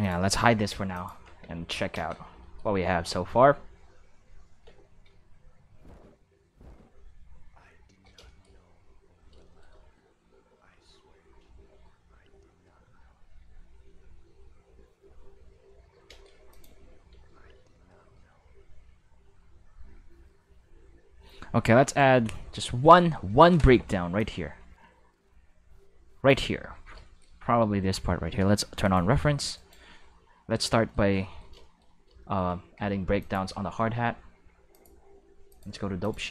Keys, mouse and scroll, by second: 0.0 click, 0.9 click, 1.4 q, 1.9 space, 2.5 middle click, 8.0 middle click, 8.2 shift+middle drag, 9.3 shift+middle drag, 16.0 space, 16.5 click, 16.6 space, 20.8 space, 21.8 right click, 22.4 shift+middle click, 23.6 middle click, 24.1-26.2 drag, 28.8 click, 29.5 right click, 30.1 q, 33.1 click, 34.7 click, 35.4 click, 36.0 click.